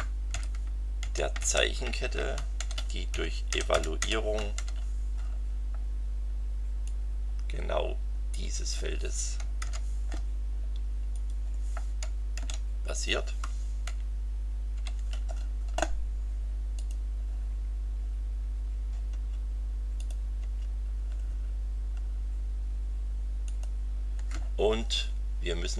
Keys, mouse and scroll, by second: 0.3 s, 1.0 t, 1.4 r, 2.6-4.5 typing, 6.8-8.9 drag, 9.6 ctrl+c, 11.1 click, 12.3 ctrl+v, 13.8 shift+9, 14.7 shift+9, 16.7 click, 19.1 Return, 20.0 click, 20.4 Return, 21.4-21.7 scroll down 2, 23.4 click.